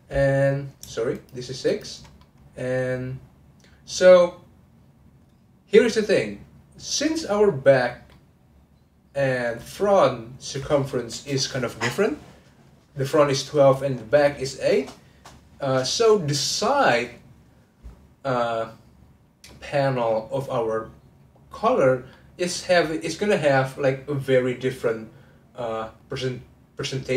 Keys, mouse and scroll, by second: 1.1 shift+click, 1.6 shift+click, 2.1-5.3 middle drag, 8.1-11.2 middle drag, 19.5-25.2 middle drag.